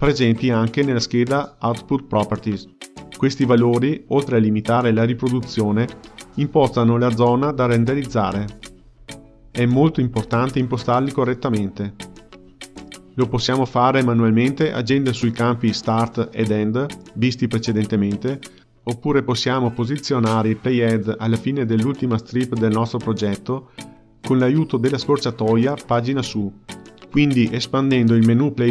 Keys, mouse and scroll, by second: 0.2 space, 2.2 space, 6.2-9.2 drag, 12.3-15.4 drag, 16.5 space, 19.2-24.4 ctrl+middle drag, 24.4 click, 26.3 Page_Up.